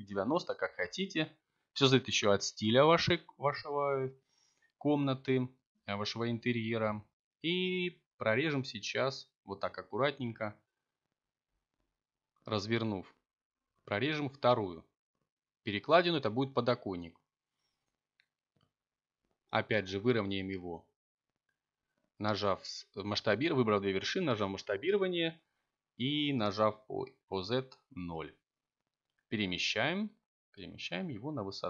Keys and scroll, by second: 2.1 a, 4.5 k, 9.3 k, 13.7 Return, 15.5 1, 16.7 3, 18.1 s, 18.5 z, 19.1 0, 19.5 Return.